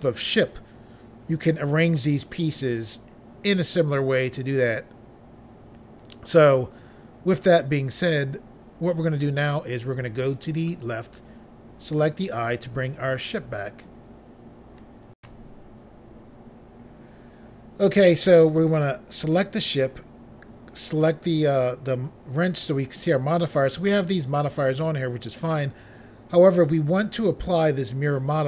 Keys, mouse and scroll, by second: 12.0 click, 15.2 Pause, 19.2 click.